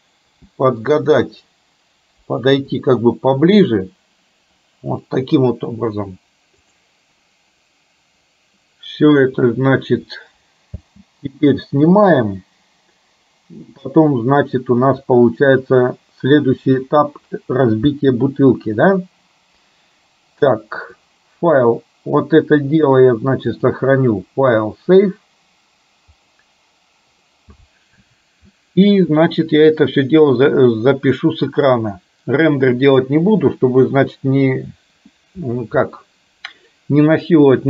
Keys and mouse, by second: 10.8 space, 18.0 space, 23.6-26.8 drag, 31.8-33.1 drag.